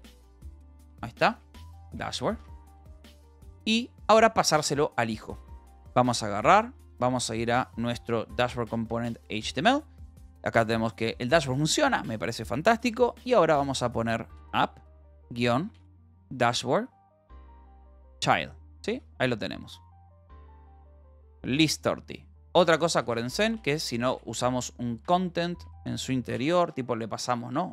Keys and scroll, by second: 5.3 shift+h, 5.7 space, 6.3 d, 6.7 h, 8.8 Return.